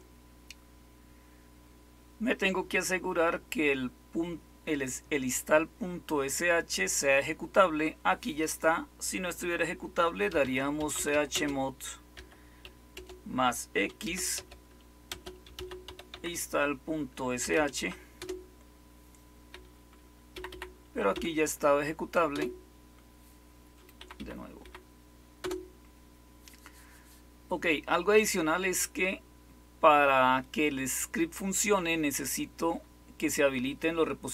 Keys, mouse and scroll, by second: 10.0-12.9 typing, 13.9-19.6 typing, 20.2 Up, 20.4 Up, 20.8-21.8 typing, 22.2 Return, 23.7-25.3 typing.